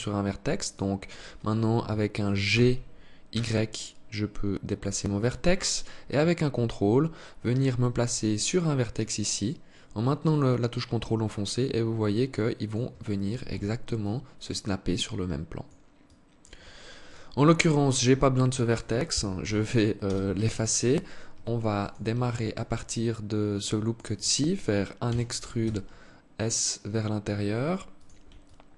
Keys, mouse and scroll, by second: 2.0 g, 13.5 alt+click, 15.6 alt+click, 16.6 right click, 18.9 Delete, 21.4 alt+right click, 22.0 alt+click, 24.6 e, 28.0 alt+click.